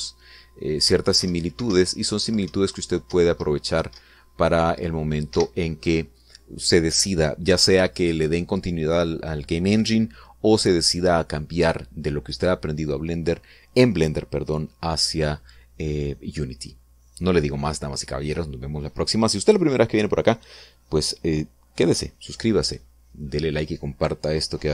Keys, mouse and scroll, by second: 0.0 Up, 2.2 Right, 2.7 Up, 3.5 Right, 4.1 Up, 6.3 Escape.